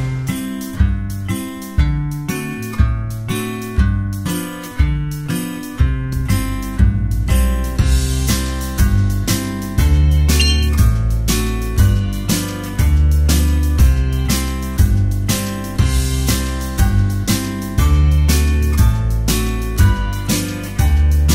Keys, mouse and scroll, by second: 0.2 space, 2.8 space, 3.0 space, 3.8 space, 4.2 space, 5.3 ctrl+z, 6.3-11.2 typing, 11.6 ctrl+z, 13.2 space, 14.4-21.3 typing.